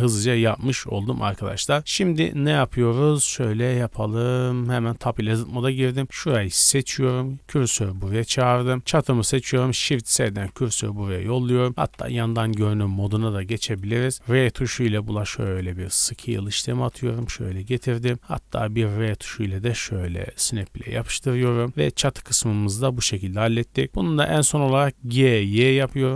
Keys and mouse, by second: 4.4-6.1 middle drag, 4.8 Tab, 5.3 1, 6.1 click, 6.3 middle click, 6.6 click, 6.7-8.7 middle drag, 7.2 shift+s, 7.9 Tab, 8.7-9.4 drag, 9.4-10.4 shift+middle drag, 10.4 shift+s, 11.7 r, 12.1 KP_1, 12.8-13.2 shift+middle drag, 13.5 shift+middle drag, 13.8-21.0 middle drag, 14.1 r, 16.0 z, 18.1 r, 21.0 shift+click, 21.5-23.8 middle drag, 21.5 z, 25.0-26.1 middle drag, 25.0 g.